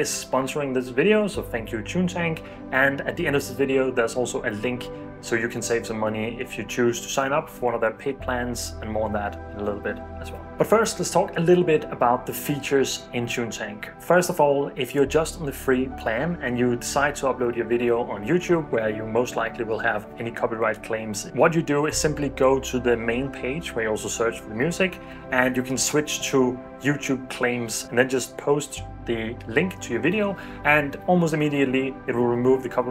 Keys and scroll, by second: 24.8 super+v.